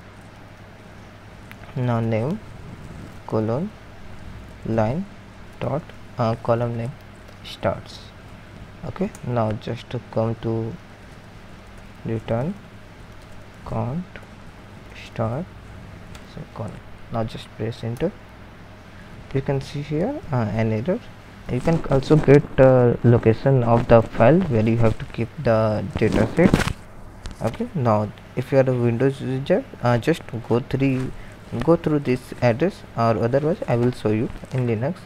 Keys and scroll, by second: 0.4 typing, 1.5-3.1 typing, 4.2-8.5 typing, 10.7-15.8 typing, 17.7-18.8 typing.